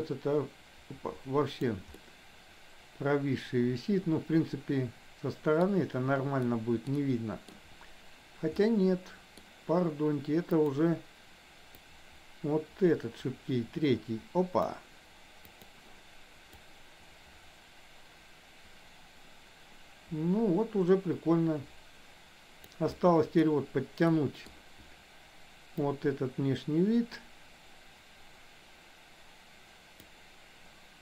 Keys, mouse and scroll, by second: 2.0-5.6 middle drag, 6.5 middle click, 7.0 middle click, 8.6 middle click, 10.6 click, 11.9-14.8 drag, 15.5 click, 16.8-22.9 drag, 23.0 middle click, 24.1 middle click, 25.9-30.1 drag.